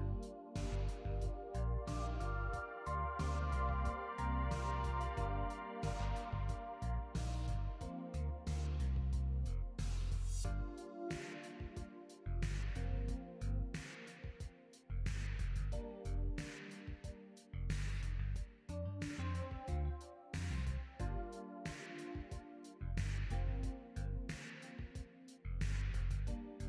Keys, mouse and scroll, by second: 4.5 click, 5.2 click, 6.7 click, 8.4 click, 11.4 click, 13.4 click, 14.2 scroll down 2, 16.2 click, 17.2 click, 24.9 click, 25.7-26.4 scroll down 5.